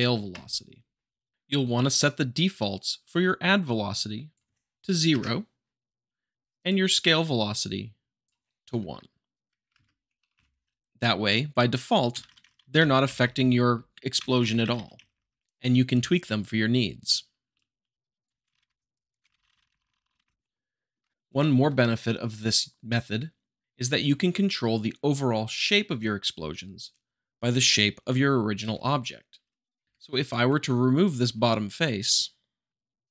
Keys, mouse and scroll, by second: 1.3-1.7 drag, 6.5-7.5 drag, 10.3 Return, 10.6 Left, 12.2 Right, 13.0 Left, 14.3 Right, 14.9 Left, 17.5 shift+click, 18.5 Right, 18.9 click, 19.3 Right, 19.9 Right, 20.1 Right, 20.9-22.3 shift+middle drag, 22.2 click, 29.8 3, 30.1-31.1 drag, 33.0 x.